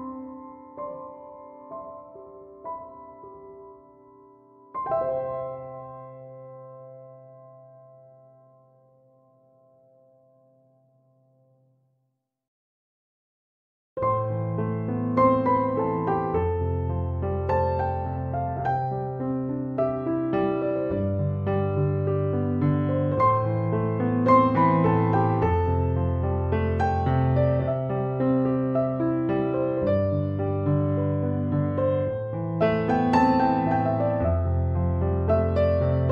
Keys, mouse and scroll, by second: 13.0 Escape, 25.0 Return.